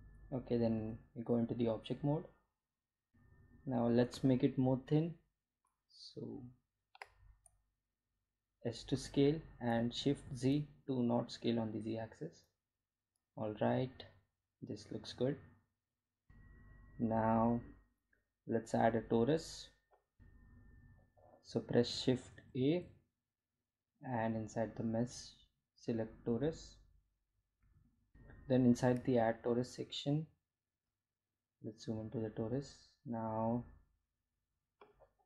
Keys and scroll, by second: 3.0 s, 6.2 s, 7.5 shift+z, 31.4 Delete.